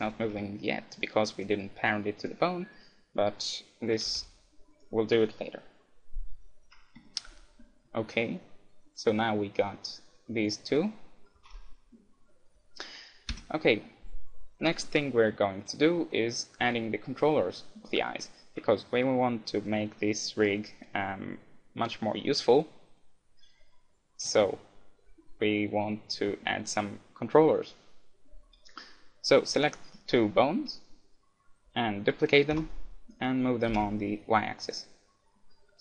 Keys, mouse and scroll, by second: 0.3 r, 0.6-1.6 middle drag, 1.6-3.3 right drag, 4.1 r, 4.8-6.8 right drag, 7.1-9.2 middle drag, 10.5-11.8 right drag, 11.4 r, 11.8 KP_1, 12.3-15.7 middle drag, 13.3 Tab, 16.1-18.0 middle drag, 28.6-30.8 middle drag, 29.6-31.6 right drag, 32.6 shift+d.